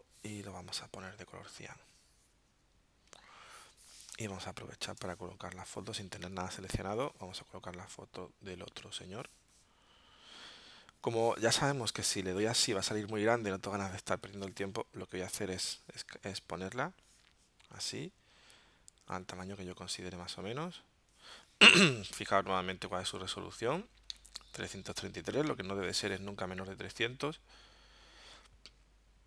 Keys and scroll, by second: 4.1 space, 6.5 super+d, 14.2 super+z, 22.9 alt+super+-, 24.1 alt+super+0.